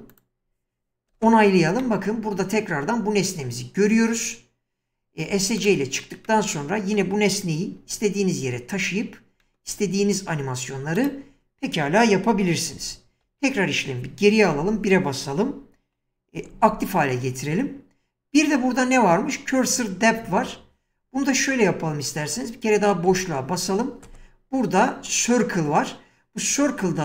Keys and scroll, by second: 1.1 space, 5.3 Escape, 7.8 g, 12.8 ctrl+z, 14.5 1, 16.5 ctrl+x, 23.1 space.